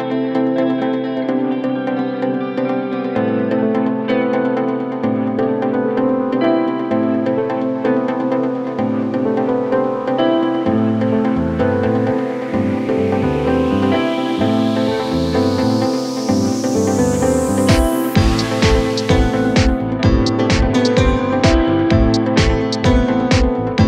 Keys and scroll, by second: 12.5 3, 13.0 ], 15.1 ], 15.5 ., 19.0 ], 20.1 ], 22.5 ].